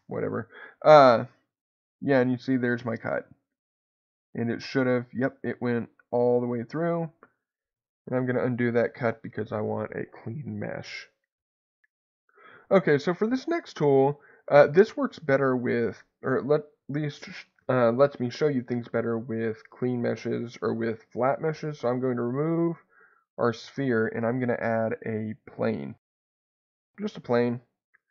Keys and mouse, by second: 3.5 middle click, 5.1-7.6 middle drag, 7.9 ctrl+z, 13.4 click, 13.7 Tab, 23.7 shift+a, 27.4 Tab, 28.0 middle click.